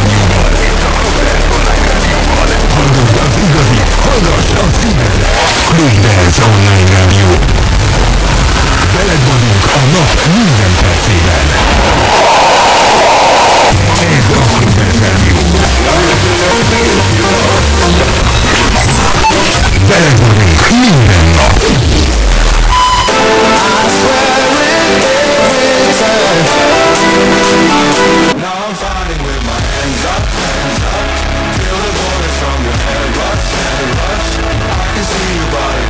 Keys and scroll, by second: 28.5 Page_Down.